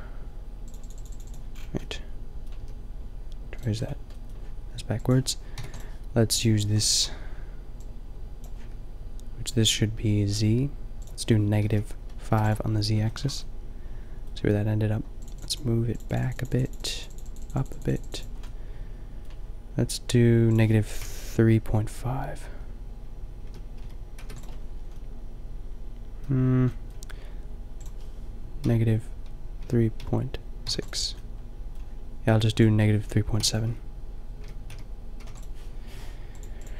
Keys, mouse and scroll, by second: 1.8-3.4 drag, 2.6 g, 3.7-5.0 drag, 5.0 middle click, 5.8 drag, 13.1 middle click, 13.4-24.7 middle drag, 25.0-27.8 middle drag, 27.8-30.0 drag, 31.3-32.5 middle drag, 32.5-35.4 drag, 36.3-36.7 drag.